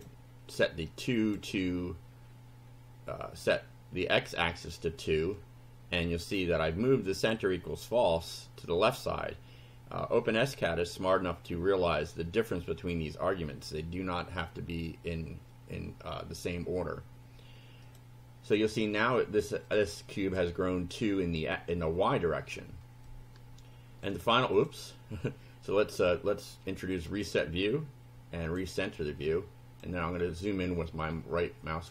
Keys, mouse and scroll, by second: 0.9 click, 6.1-7.5 drag, 7.5-12.0 middle drag, 17.9 click, 19.7 click, 21.4 middle click, 23.1-24.4 shift+drag, 24.4 shift+middle click, 24.6 shift+click, 27.1 click, 28.5 click, 29.3 click, 30.2-31.9 scroll up 9.